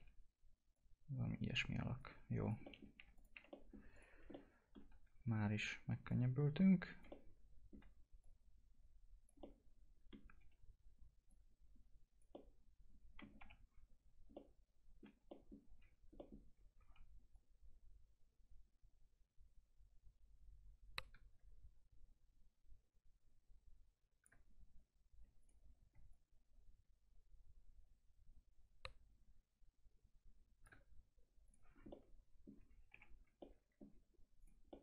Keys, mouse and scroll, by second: 0.7-2.4 drag, 2.4 click, 2.6 middle click, 2.9 Delete, 3.1 click, 3.5 middle click, 3.9 click, 4.0 scroll down 1, 4.3 alt+middle click, 4.8 w, 6.1 click, 7.0 alt+middle click, 8.2 click, 9.4 alt+middle click, 10.3 w, 11.2 click, 12.3 alt+middle click, 13.4 F4, 13.5-14.2 scroll up 1, 14.3 alt+middle click, 15.8 scroll down 1, 16.1 middle click, 17.3-25.4 shift+drag, 25.4 click, 26.1 shift+click, 31.4 click, 31.8 scroll down 1, 31.8 alt+middle click, 32.9 F4, 33.3 alt+middle click, 34.4 click, 34.7 middle click.